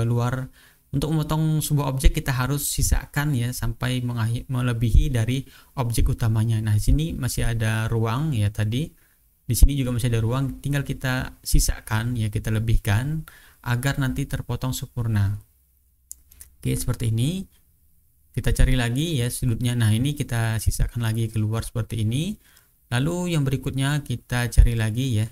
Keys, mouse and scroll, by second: 1.6 click, 2.7 click, 3.3 click, 6.0-6.7 ctrl+scroll down 2, 6.7 ctrl+scroll down 1, 7.5 ctrl+scroll down 1, 8.1-8.7 ctrl+scroll up 2, 10.4-13.5 drag, 14.3-15.7 drag, 16.2-16.6 ctrl+scroll down 2, 16.8 ctrl+scroll up 2, 17.7 ctrl+scroll down 1, 18.2-19.3 ctrl+scroll up 1, 20.6-23.2 drag, 23.5-24.3 ctrl+scroll up 1, 24.6-25.3 ctrl+scroll down 3.